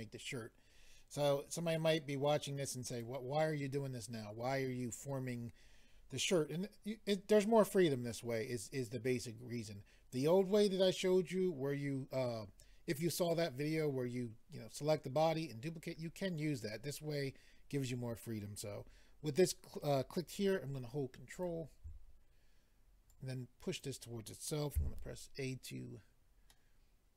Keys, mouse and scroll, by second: 2.9 click, 21.3 ctrl+right click, 23.1 click, 24.8 a, 26.5 middle click.